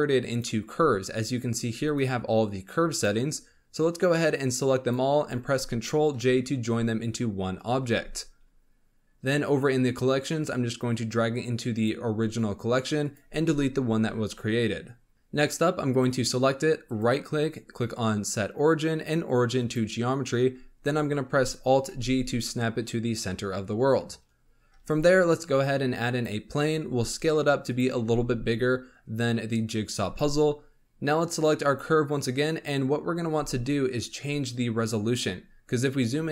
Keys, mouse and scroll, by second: 0.3 click, 1.8 click, 2.9 click, 4.1 click, 6.1 ctrl+j, 10.4 click, 13.0 click, 14.0 Delete, 15.9 click, 16.8-19.9 right drag, 21.8 alt+g, 24.8 shift+a, 26.8 s, 27.9 s, 31.6 click, 32.9 scroll up 2, 33.3 z, 35.3-36.0 scroll up 10, 35.7 middle click.